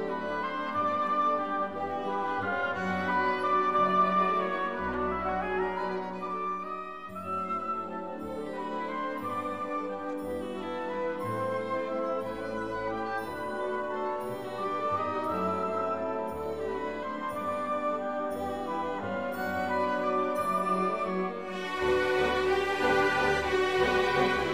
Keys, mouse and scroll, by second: 0.7 click, 1.9-2.9 drag, 3.4 click, 6.2 click, 8.1 click, 10.0 click, 11.2 click, 12.4 right click, 13.8 click, 15.7 click, 17.1 click, 18.2 click, 19.0 click, 19.8 click, 20.1 right click, 21.4 click, 22.8 click, 23.6 click.